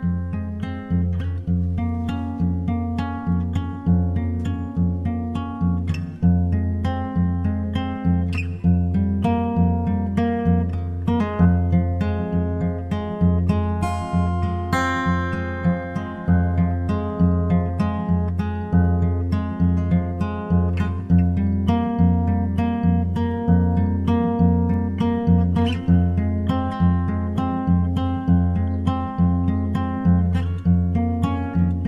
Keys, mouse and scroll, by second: 0.0 Escape, 2.5-4.4 middle drag, 4.5-6.0 right drag, 10.3-11.9 drag, 12.3-13.7 drag, 14.4-16.0 drag, 22.8-25.6 middle drag, 26.0 shift+c, 27.1-30.9 middle drag, 29.6 shift+a.